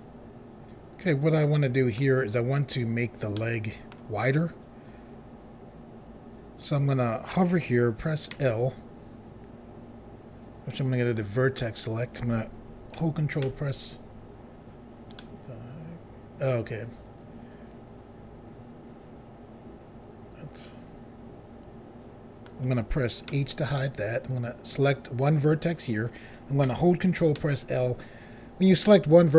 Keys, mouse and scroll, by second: 3.3 middle click, 8.3 l, 11.1 click, 13.4 ctrl+i, 15.1 middle click, 23.3 h, 24.3 click, 27.4 ctrl+l.